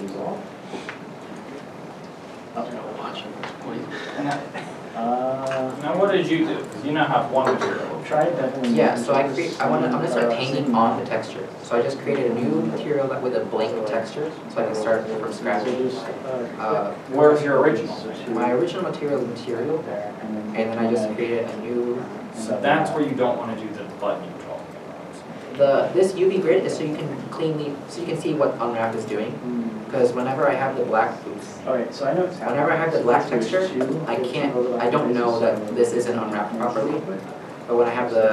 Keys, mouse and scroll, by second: 1.3 scroll up 1, 1.3 a, 3.9 shift+middle click, 29.4 middle click, 31.7 ctrl+z, 34.3 ctrl+z, 35.1 shift+middle click, 36.4 shift+middle click.